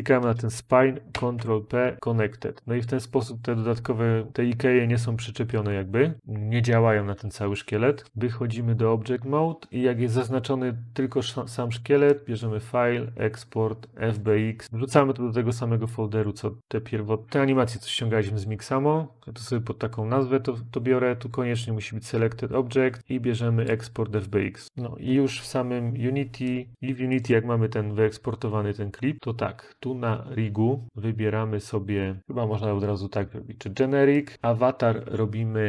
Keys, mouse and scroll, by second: 1.0 ctrl+p, 1.9 Return.